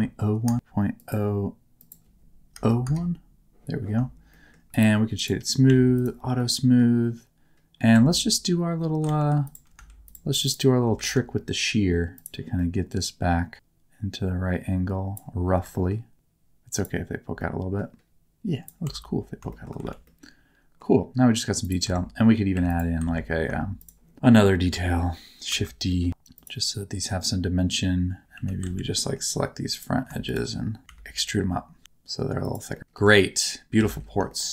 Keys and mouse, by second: 1.0-2.8 drag, 4.3 shift+middle click, 4.7 right click, 5.6 q, 6.3 middle click, 7.9 Tab, 9.0 alt+z, 10.4 alt+shift+click, 11.0 alt+z, 12.2 click, 12.5 middle click, 15.5 g, 16.7 click, 17.4 middle click, 18.8 Tab, 19.5 shift+middle click, 19.8 alt+a, 20.0 middle click, 21.6 click, 21.8 Tab, 22.5 3, 22.7 click, 23.0 alt+z, 23.7 shift+click, 24.2 alt+z, 25.5 shift+d, 26.3 click, 28.3 2, 28.6 alt+z, 28.9 middle click, 30.8 e, 31.8 z, 32.4 click, 32.7 middle click, 32.9 Tab, 33.2 middle click, 33.7 alt+a, 34.2 shift+middle click.